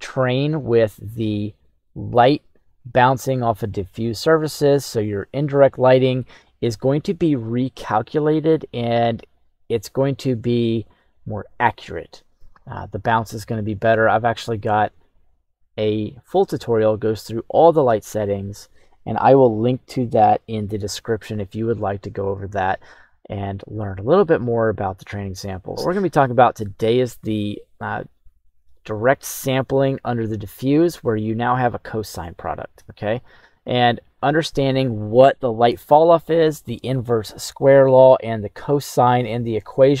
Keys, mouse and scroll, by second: 26.1-34.7 drag, 38.8-40.0 middle drag.